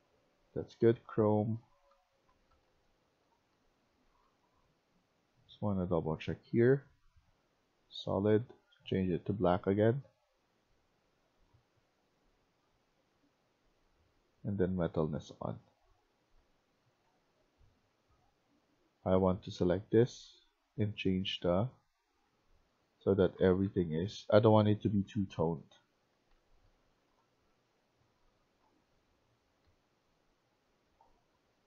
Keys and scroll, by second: 1.6-3.9 typing, 16.3-17.7 typing, 22.1-31.1 typing.